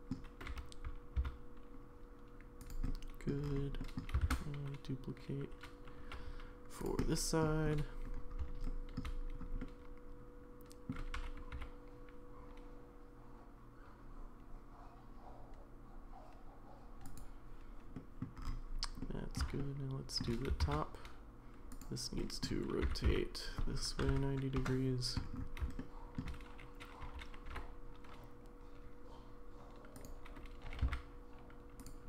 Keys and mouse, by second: 0.5 g, 2.8 middle click, 3.8 middle click, 4.2 shift+d, 7.0-7.4 middle drag, 8.6 shift+middle click, 9.6-10.9 middle drag, 11.1 g, 17.9 middle drag, 19.0 middle click, 19.6 shift+middle click, 20.6 shift+d, 22.2 middle drag, 22.8 r, 25.8 shift+middle click, 27.0 g.